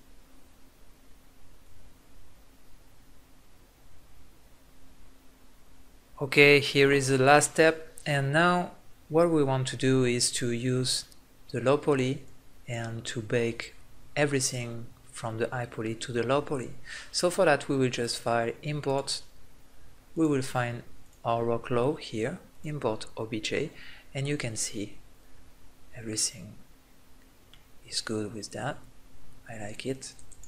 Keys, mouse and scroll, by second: 12.3-14.2 drag, 18.0-19.9 drag, 22.9 click, 23.4-24.5 middle drag, 27.8-28.8 middle drag, 28.8-30.1 drag.